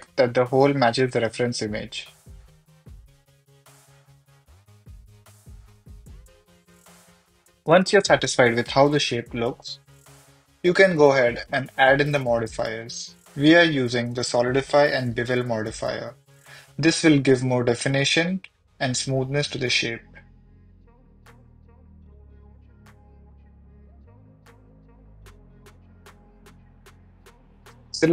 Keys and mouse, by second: 1.3 click, 3.0 s, 4.3 click, 4.6 click, 5.3 Tab, 5.9 h, 6.0 middle click, 12.9 middle drag, 14.4-15.9 drag, 17.3-17.6 middle drag, 19.0 middle click, 19.8-21.2 drag, 21.9-22.4 drag, 23.4 click.